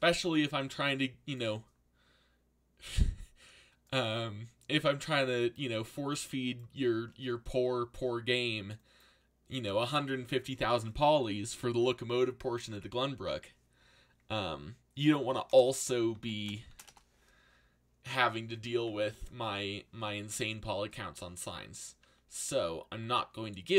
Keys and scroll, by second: 15.1-17.2 typing, 19.6 z, 22.5 g.